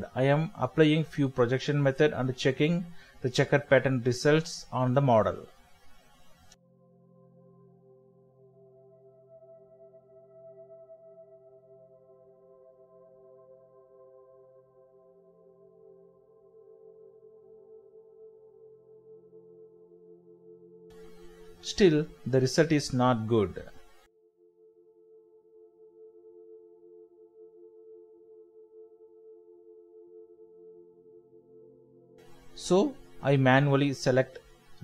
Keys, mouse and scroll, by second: 0.6 middle click, 10.3 middle click, 21.0 middle click, 28.8 middle click, 30.0 alt+shift+click, 30.8-31.1 scroll up 1, 31.1 shift+middle click, 31.6 alt+z, 32.4 alt+shift+click, 32.9 middle click, 34.0 scroll up 1, 34.3 shift+middle click.